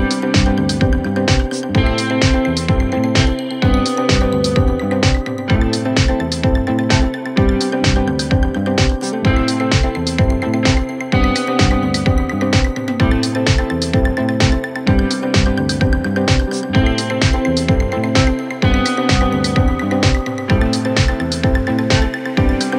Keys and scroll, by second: 4.8 Left, 5.9 F3, 6.8 shift+F2, 7.2 Escape, 12.3 c, 12.5 e.